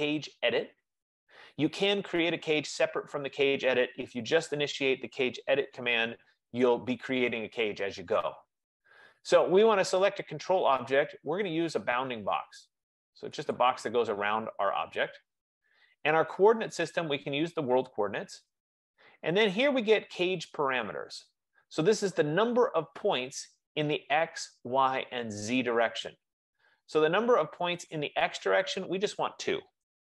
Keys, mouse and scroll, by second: 6.8-11.7 drag, 11.8 F15, 12.7 F15, 13.6 click, 17.9 click, 21.7-23.0 drag, 28.8-30.2 drag.